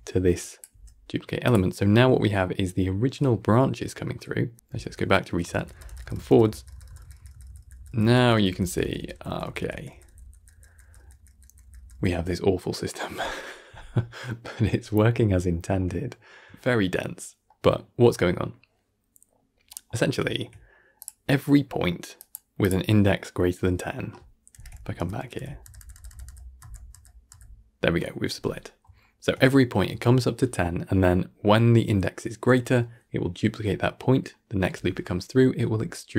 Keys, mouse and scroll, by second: 0.3 click, 0.6 g, 1.6 scroll down 3, 1.8-4.5 middle drag, 4.5 Right, 5.3-10.6 Right, 10.8 Right, 11.0-12.3 Right, 12.9 Right, 14.0-14.6 scroll down 1, 14.7-19.3 shift+middle drag, 19.3 scroll up 1, 19.6-20.5 middle drag, 20.5-20.9 scroll up 1, 20.9 click, 21.2-22.1 middle drag, 22.1 click, 22.5 click, 23.3-24.4 middle drag, 24.4 shift+Left, 24.9 Right, 25.1 Right, 25.3 Right, 25.5-26.0 Right, 26.1 Right, 26.5 Right, 26.8 Right, 28.6 scroll up 1, 28.9-36.1 shift+middle drag.